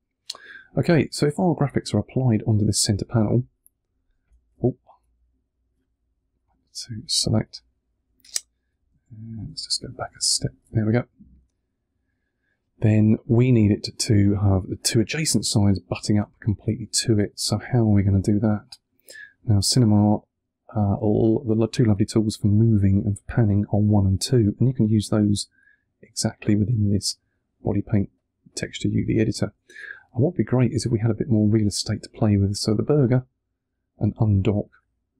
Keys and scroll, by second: 4.4 super+z, 8.8 super+z, 25.1 1.